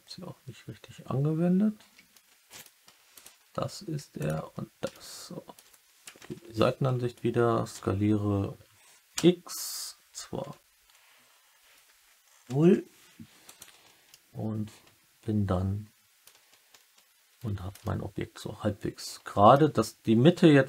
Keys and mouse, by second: 2.0 alt+middle click, 4.1 alt+shift+click, 4.8 alt+middle click, 6.2 KP_1, 7.7 s, 9.1 x, 12.5 0, 13.4 click, 14.0-16.2 alt+middle drag, 16.3 Tab, 17.2 Tab, 17.7-19.4 alt+middle drag.